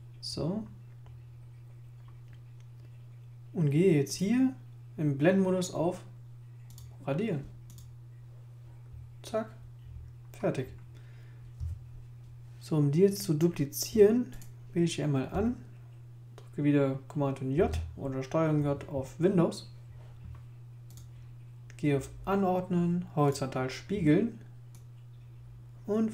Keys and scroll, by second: 17.5 super+j.